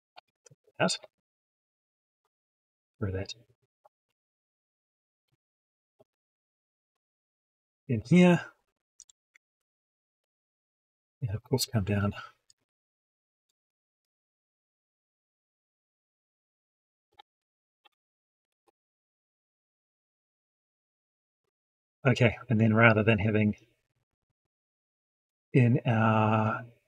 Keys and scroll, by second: 6.8 ctrl+v, 11.1 ctrl+End, 13.4 ctrl+x, 17.2 ctrl+v.